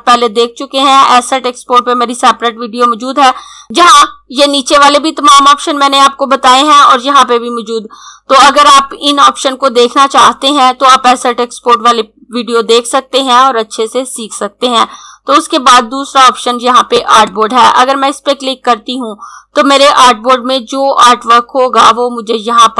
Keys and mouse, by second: 16.5 click.